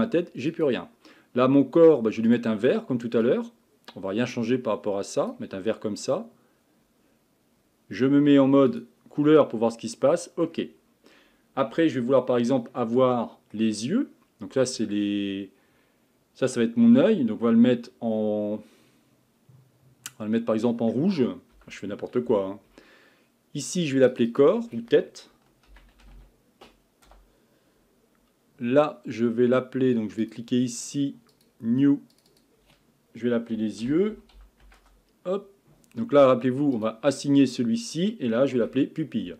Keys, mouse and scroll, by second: 0.5-2.4 drag, 8.7 click, 9.3-10.8 middle drag, 10.8-11.3 scroll up 1, 11.4-11.7 scroll up 3, 11.7 Tab, 12.1-13.1 scroll up 1, 13.1-16.1 shift+middle drag, 24.3-27.3 drag, 30.2-32.2 drag, 32.3-35.4 drag, 36.8-38.6 drag, 38.6 l.